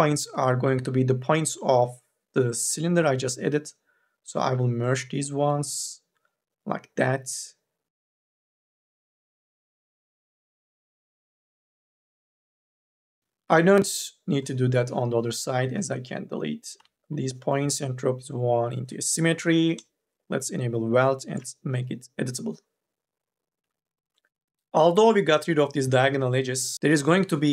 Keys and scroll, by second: 13.0 space, 13.6 KP_0, 16.6 Delete, 21.1 c, 23.5 Delete, 26.7 1.